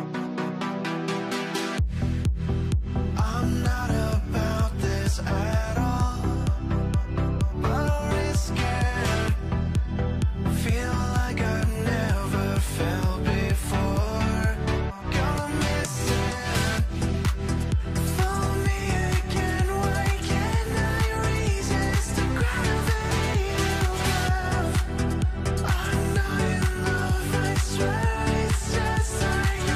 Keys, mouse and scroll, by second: 4.8 right click, 6.5-8.0 scroll down 1, 10.7 alt+w, 12.1 ctrl+s, 16.5 alt+q, 18.1 alt+w, 18.8 middle click, 25.9 middle click.